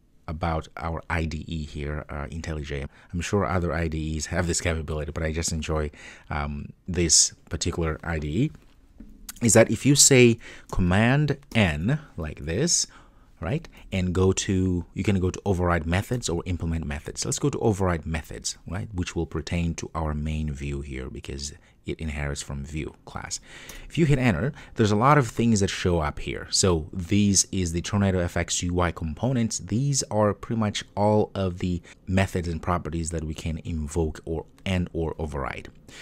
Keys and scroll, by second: 11.6 super+n, 23.9 ctrl+o.